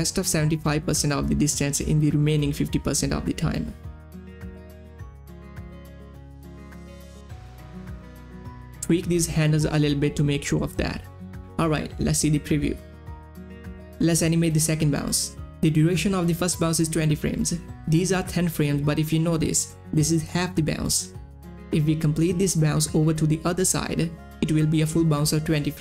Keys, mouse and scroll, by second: 5.1-6.4 drag, 9.3-11.9 drag, 11.9 space, 12.6 click, 12.8 space, 13.3-17.1 drag.